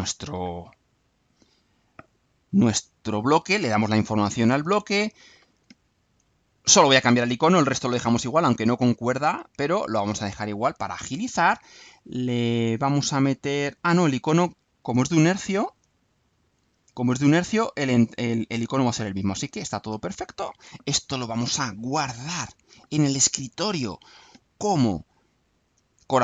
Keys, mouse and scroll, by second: 3.3 click, 9.7 click, 14.9-15.9 alt+drag, 16.2 alt+click, 19.0 click, 22.3 click, 23.5 click, 26.1 click.